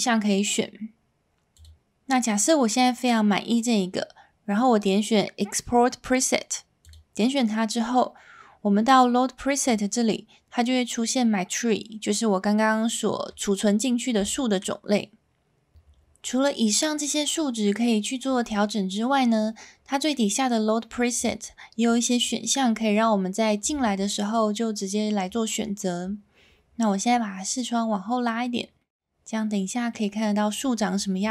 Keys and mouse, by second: 6.8 click, 9.7-15.7 drag, 21.1-25.9 drag, 28.8-29.9 middle drag.